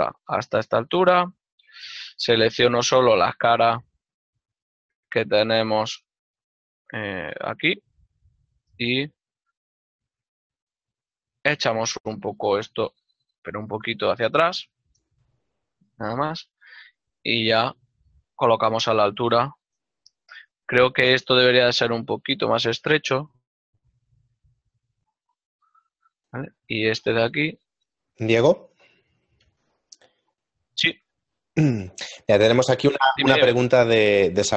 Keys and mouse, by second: 0.0 ctrl+click, 0.6 shift+middle click, 5.5 right click, 5.8 z, 7.7 click, 9.3 z, 10.0 click, 10.6 ctrl+middle click, 13.3 g, 15.2 ctrl+middle click, 23.6 click, 23.7 z, 24.9 click, 25.5 ctrl+middle click, 27.2 alt+click, 29.9 middle click, 31.0 z, 34.1 middle click.